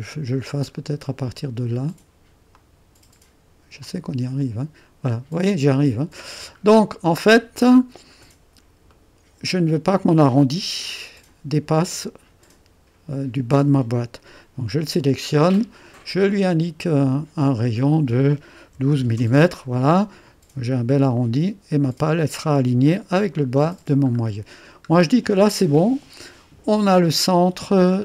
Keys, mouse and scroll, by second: 0.5 scroll down 1, 0.8-2.5 scroll up 1, 2.5 click, 3.8-6.1 drag, 6.6-8.9 scroll up 1, 8.9 right click, 9.7 click, 14.6 click, 16.9-18.7 drag, 18.5-19.4 typing, 21.1 typing, 23.5-24.2 scroll down 1, 24.2-26.4 scroll up 1.